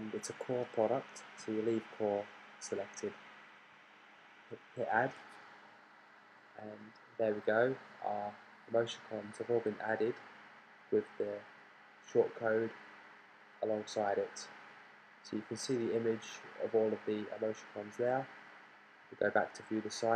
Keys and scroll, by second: 0.0-0.5 typing.